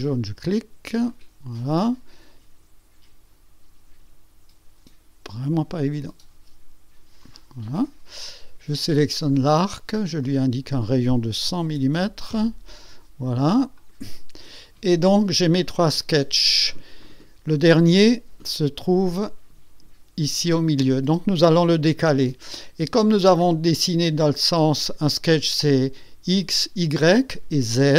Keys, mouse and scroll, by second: 1.1 click, 5.7 click, 7.2 click, 7.7 right click, 9.1 click, 10.2 click, 11.4 KP_1, 11.8 KP_0, 12.3 KP_Enter, 13.7 click, 17.0 click, 17.9 click, 24.8-25.5 drag.